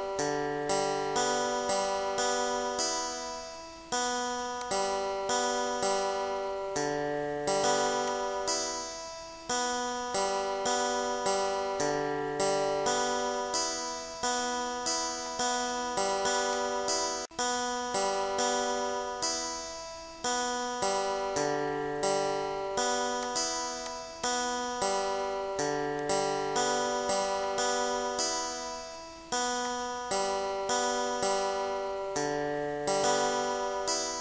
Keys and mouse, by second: 4.1 click, 4.6 click, 8.1 click, 10.7 click, 15.3 click, 16.6 click, 18.2 click, 20.0 click, 21.4 click, 23.2 click, 23.9 click, 26.0 click, 27.5 click, 28.6 click, 29.7 click.